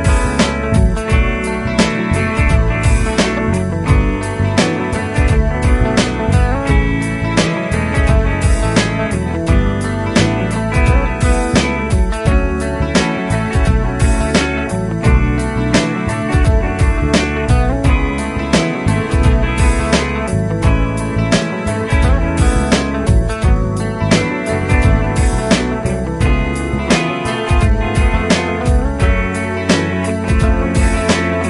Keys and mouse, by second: 5.4 double click, 7.8 typing, 13.5 shift+click, 17.4 shift+click.